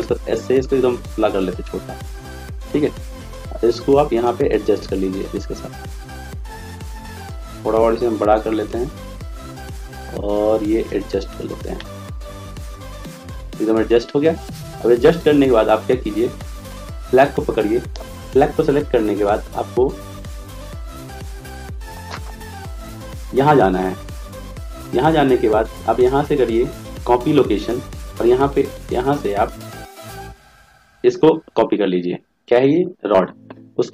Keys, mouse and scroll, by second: 4.4-8.7 drag, 16.8-27.8 right drag.